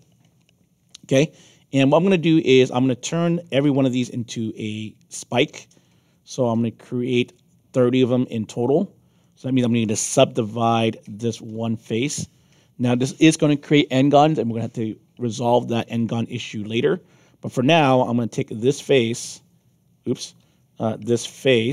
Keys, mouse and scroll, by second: 1.6 alt+click, 9.2 alt+click, 11.5 alt+click, 17.5-18.5 right drag, 19.1 click, 20.2 z, 21.2 q.